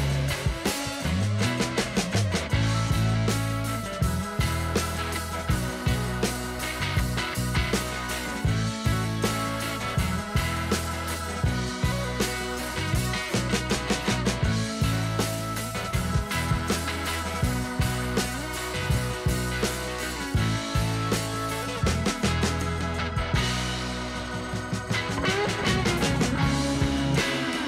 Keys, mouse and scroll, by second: 1.7 click, 4.6 click, 6.0 click, 6.6 click, 8.6 click, 11.6 click, 11.8 click, 14.7 click, 19.7-22.1 drag, 26.8-27.6 drag.